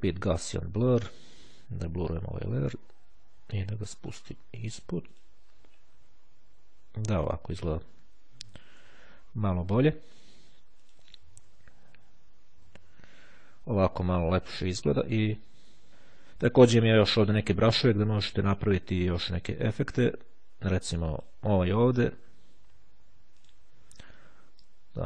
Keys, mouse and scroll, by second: 4.2 click, 5.1 click, 6.3-6.9 ctrl+scroll up 2, 8.5-9.0 shift+scroll down 2, 10.9 shift+click, 13.0-13.5 ctrl+scroll up 2, 14.1-15.7 ctrl+scroll down 4, 16.1-16.5 scroll up 2, 16.7-17.5 scroll up 2, 19.8 click, 23.5 click, 24.9 click.